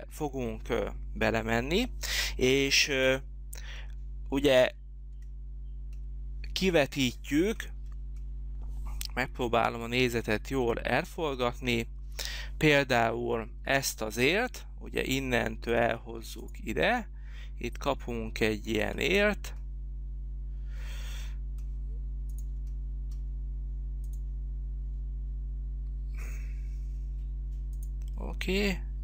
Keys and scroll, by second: 9.2 h.